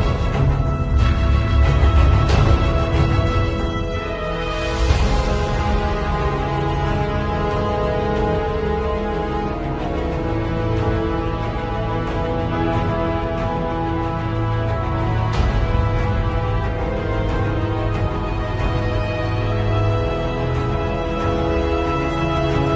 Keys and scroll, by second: 0.4 ], 1.8-5.8 typing, 6.8 b, 7.2 [, 9.6 x, 11.5 space, 13.2 space, 14.0 space, 14.5 [, 16.5 z, 17.0 space, 19.1 space, 21.2 b, 21.9 x.